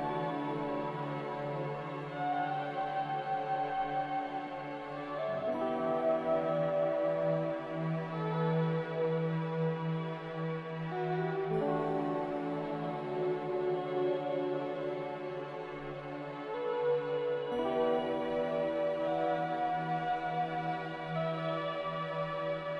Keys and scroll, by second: 6.7 1, 6.8 0, 7.2 Return, 18.1 c.